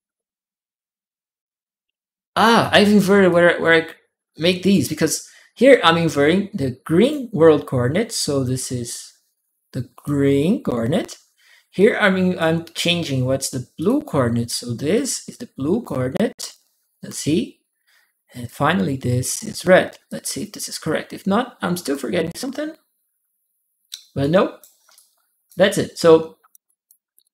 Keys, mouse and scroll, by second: 3.1-4.5 drag, 6.8 click, 8.4-9.8 drag, 11.6 click, 13.6 click, 14.7 click, 18.2 click, 19.8-21.7 drag, 24.0 right click, 24.7 click, 25.7 right click, 26.5 click, 27.0 click.